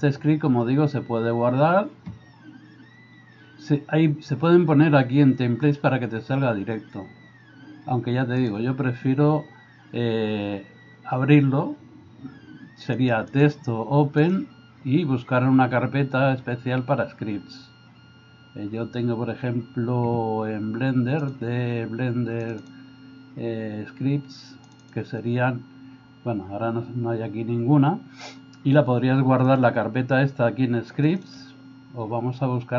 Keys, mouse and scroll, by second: 8.4-13.0 drag, 13.4-14.5 drag.